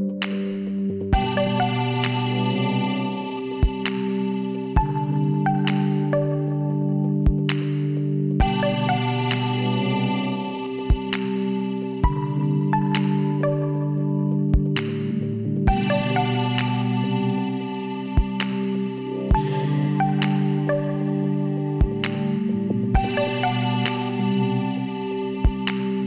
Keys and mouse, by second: 1.3 g, 3.9 KP_1, 4.6 z, 6.8-8.6 drag, 7.3 b, 9.6-11.4 drag, 11.4 middle click, 12.1 z, 15.1 middle click, 15.6-17.6 drag, 16.5 x, 17.8 middle click, 18.3-19.9 drag, 20.2-21.5 middle drag, 21.8-26.0 drag.